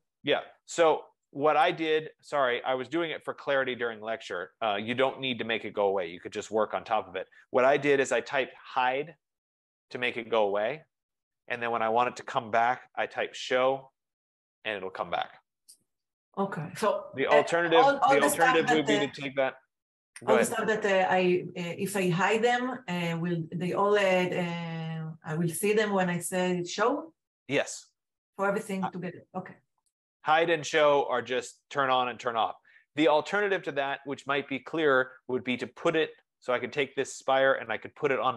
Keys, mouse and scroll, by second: 0.6-1.4 scroll, 2.0 click, 4.1-4.4 scroll, 4.9-5.4 scroll, 9.1-10.3 typing, 12.5-14.2 typing, 18.2-18.9 typing, 18.9-24.0 drag, 34.0-35.1 drag.